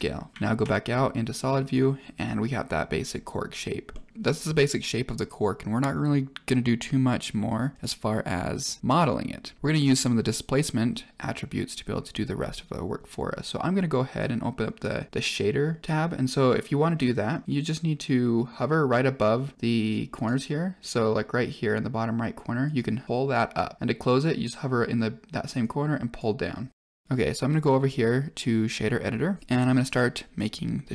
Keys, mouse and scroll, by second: 0.3 Tab, 0.3 z, 0.8-1.3 middle drag, 1.6-2.2 middle drag, 3.8 middle drag, 14.1-14.8 drag, 15.2 click, 19.8 click, 22.6 click, 25.5 click, 26.8 click, 27.6-27.9 drag, 29.4 middle click, 29.4-30.9 scroll up 4.